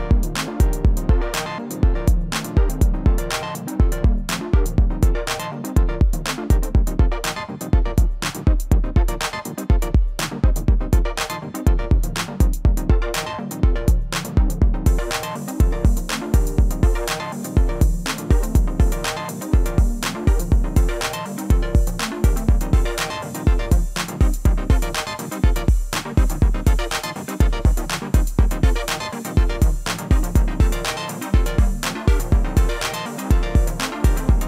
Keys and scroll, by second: 25.7 ctrl+z.